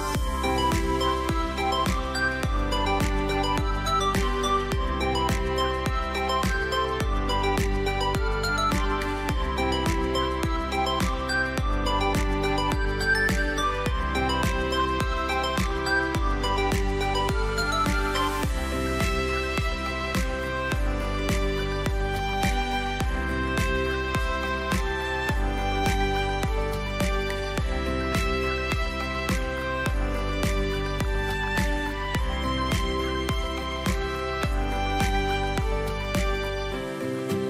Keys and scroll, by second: 0.8 v, 2.5 c, 15.0 ctrl+z, 15.3 a, 16.5 c, 19.1 space, 20.9 v, 22.8 c, 24.3 space, 24.8 v, 26.2 c, 28.5 space, 28.9 v, 29.5 space, 31.7 Delete, 36.0 Delete.